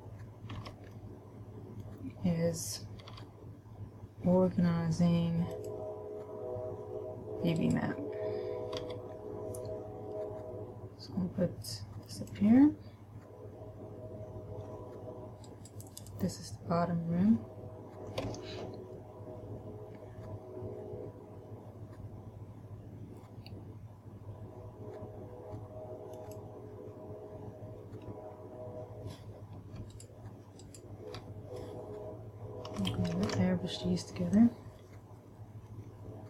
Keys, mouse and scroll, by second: 0.0-1.0 scroll up 1, 1.0 b, 3.5 g, 6.0 click, 8.0 right click, 9.2 g, 12.6 click, 15.9 right click, 18.6 g, 26.6 click, 30.4 shift+right click, 31.0 shift+right click, 33.5 ctrl+a.